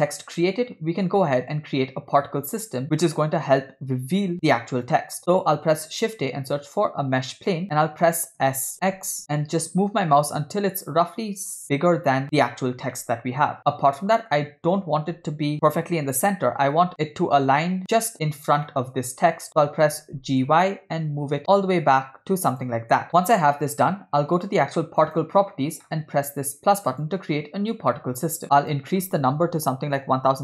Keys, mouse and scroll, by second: 0.0 scroll down 2, 0.0 middle click, 5.6 shift+a, 9.0 s, 13.0-14.4 middle drag, 18.7-19.3 middle drag, 19.5 middle click, 20.1 g, 23.0 middle click, 25.0 click, 26.9 click, 28.6-30.4 drag.